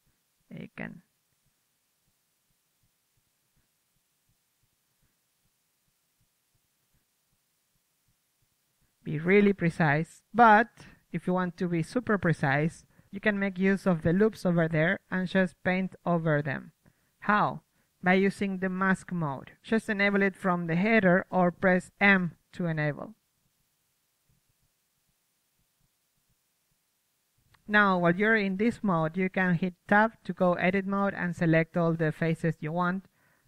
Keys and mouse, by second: 0.3 click, 1.4 click, 3.8 click, 6.0 middle click, 6.3 KP_1, 6.8 KP_3, 8.9-11.8 drag, 11.8-12.7 middle drag, 14.2 Tab, 17.4 a, 17.7 middle click, 18.4 Tab, 22.1 m, 22.7 middle drag, 24.0 KP_3, 24.5-27.8 drag, 26.9 Tab, 28.7 Tab, 30.2 Tab, 31.5 ctrl+Tab, 32.8-33.4 right drag.